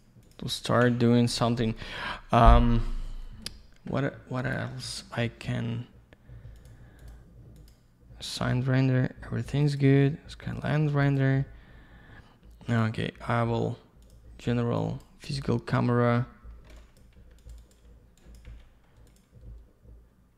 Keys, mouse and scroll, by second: 0.2 click, 0.3 click, 0.5 middle click, 0.7 double middle click, 0.8 z, 1.0 scroll down 1, 1.3 alt+middle click, 1.5 middle click, 1.6 middle click, 1.8 double middle click, 4.4 click, 4.5 click, 6.5 click, 6.6 click, 7.0 click, 7.1 click, 7.6 click, 7.7 click, 9.6 click, 9.7 click, 11.0 click, 11.1 click, 12.7 click, 12.8 click, 14.0 click, 16.8 click, 17.0 click, 17.4 click, 17.5 click, 17.6 click, 17.7 click, 18.2 click, 18.3 click, 18.4 Delete, 19.1 click, 19.2 click.